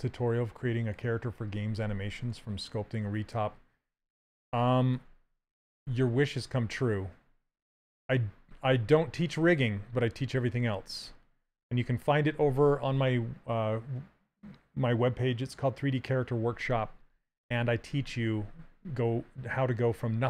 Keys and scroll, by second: 7.4 s.